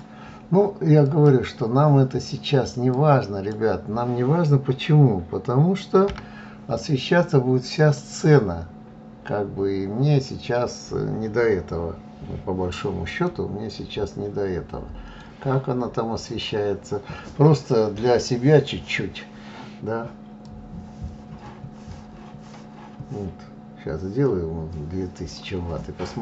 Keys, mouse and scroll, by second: 2.2 click, 4.8 g, 12.1-15.1 middle drag, 15.1 click, 19.1-22.1 drag.